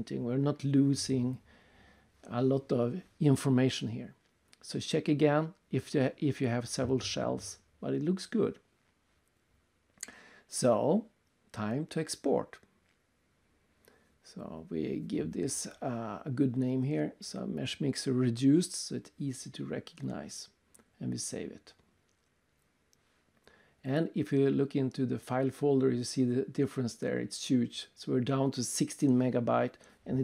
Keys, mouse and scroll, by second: 0.3 click, 1.2 click, 2.3 click, 4.5 click, 6.0 click, 8.2 click, 9.8 click, 10.5 click, 10.6 click, 13.0 click, 13.7 click, 14.2 click, 14.9 Left, 15.6-18.2 typing, 20.8 click, 22.4 click, 23.7 click, 24.2 click, 24.3 click, 25.1 click, 26.0 click, 29.0 click.